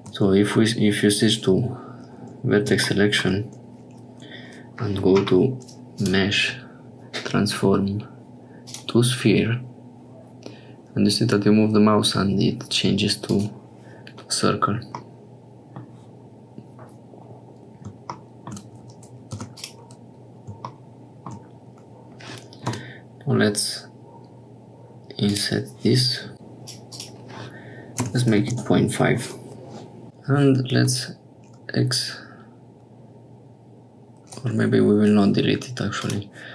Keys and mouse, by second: 2.9 shift+click, 6.0-13.3 drag, 15.0 middle click, 19.3 3, 19.5 click, 22.7 i, 26.3 click, 26.9-29.0 drag, 30.0 Tab, 30.7 x, 35.9 click.